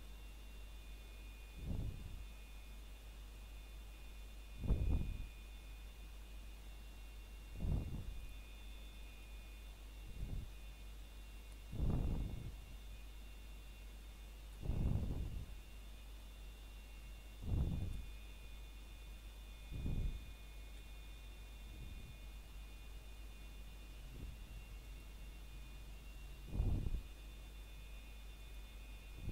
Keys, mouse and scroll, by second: 1.3 click, 3.3 s, 5.0 click, 5.4-6.0 scroll down 1, 6.0 middle click, 6.5 scroll up 1, 7.6 alt+click, 8.0 middle click, 9.2 r, 11.0 click, 11.4-11.9 scroll down 1, 11.9 middle click, 12.7 scroll up 1, 14.5 s, 16.7 click, 17.1-17.5 scroll down 1, 17.5 middle click, 18.9-19.2 scroll down 1, 19.2 middle click, 19.5 scroll up 1, 20.2 middle click, 21.2-21.5 scroll up 1, 22.7 middle click, 23.8-24.3 scroll down 1, 24.3 middle click, 24.9 scroll up 1, 25.7 middle click, 26.0 scroll down 1, 26.4 middle click, 26.9 scroll up 1, 28.3 middle click, 28.7 scroll up 1, 29.2 middle click.